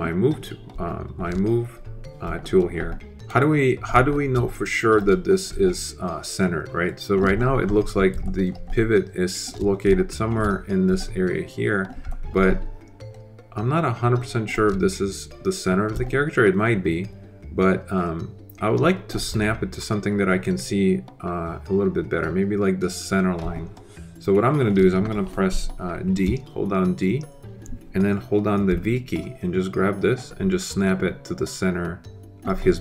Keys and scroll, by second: 26.1 d, 28.6 v.